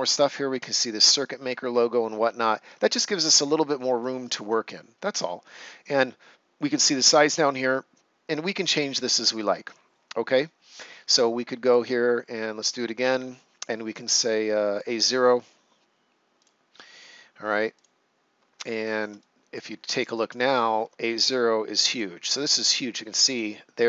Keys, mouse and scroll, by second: 1.1 right click, 2.4 ctrl+scroll down 1, 2.8 right click, 4.2 ctrl+scroll down 1, 4.6 right click, 9.5 right click, 11.5 click, 14.7 click, 18.6 ctrl+scroll down 1, 19.1 right click, 19.6 ctrl+scroll down 1, 20.1 right click, 20.5 ctrl+scroll down 1, 21.0 right click.